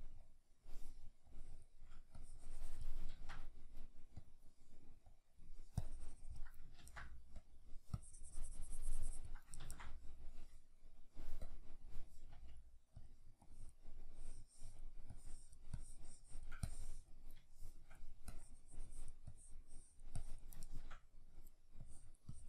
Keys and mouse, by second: 3.1 ctrl+z, 6.8 ctrl+z, 9.6 ctrl+z, 12.3 f, 17.5 shift+middle click, 18.3-20.7 drag, 20.7-21.9 shift+middle drag, 21.9-22.4 drag.